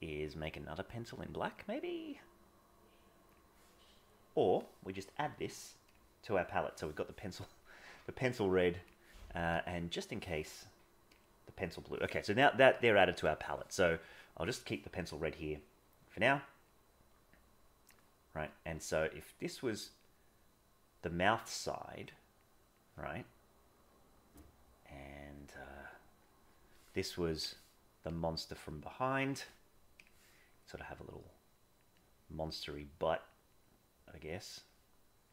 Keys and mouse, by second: 1.6-3.3 drag, 8.9 click, 12.8 click, 16.6-17.9 drag, 18.5 click, 19.3 click, 19.8 click, 20.7 click, 21.6 click, 24.4 click, 25.4 click, 28.1-29.3 drag, 29.9 click, 31.5 click, 31.9 click, 33.1 click, 33.7 click, 34.3 click, 34.6 click, 35.2 click.